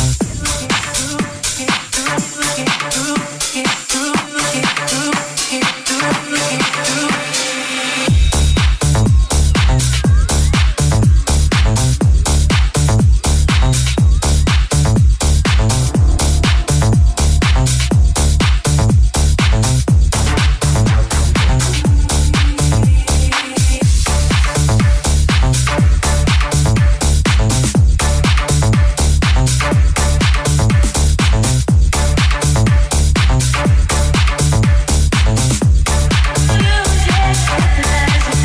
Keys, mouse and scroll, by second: 1.3 g, 2.6 right click, 2.7-10.3 middle drag, 2.9 shift+g, 6.0 right click, 7.3 g, 10.3 click, 10.4 shift+middle click, 10.8 shift+click, 10.9 shift+middle click, 11.9 right click, 11.9 shift+middle click, 12.2 click, 12.5 j, 13.0 click, 13.3 click, 13.8 click, 14.2 right click, 14.2 middle click, 14.6 right click, 14.7 middle click, 15.4 right click, 15.4-21.1 middle drag, 19.0-20.2 right drag, 20.2 shift+g, 21.1 click, 21.1-26.4 middle drag, 22.8 /, 25.9 Tab, 26.4-33.1 middle drag, 31.1 Tab, 31.9 /, 32.6 3, 33.1 right click, 33.1 shift+middle click, 33.3 shift+right click, 33.4-38.4 shift+middle drag, 35.2 w, 35.9 s, 36.9 e, 37.7 s.